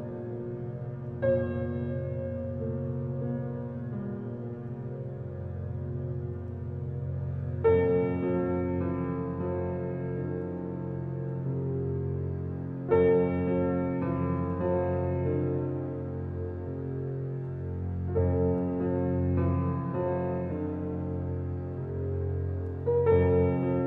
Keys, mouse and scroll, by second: 2.1 click, 7.0 click, 8.9-11.8 alt+right drag, 11.8 space, 12.0 click, 12.3 space, 12.8 ctrl+alt+scroll up 1, 13.8 ctrl+alt+scroll up 1, 14.2-16.6 alt+right drag, 16.6-23.8 drag.